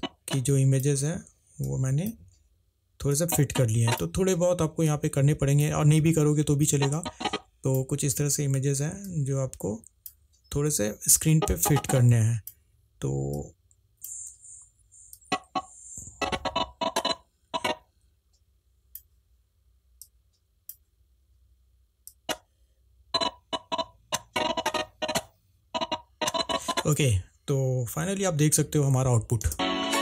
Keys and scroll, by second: 28.3 ctrl+`.